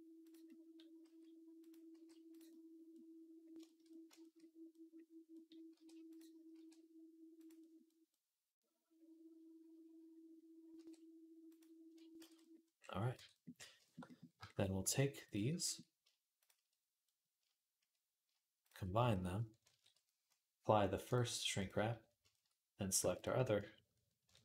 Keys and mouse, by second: 0.9 s, 1.7 g, 5.5 r, 6.3 r, 10.6 r, 12.0 ctrl+z, 13.0 Tab, 15.0 shift+click, 16.2 shift+click, 16.3 shift+middle click, 17.7-21.0 middle drag, 19.5 ctrl+j, 21.0-23.0 drag, 23.0-24.4 ctrl+middle drag.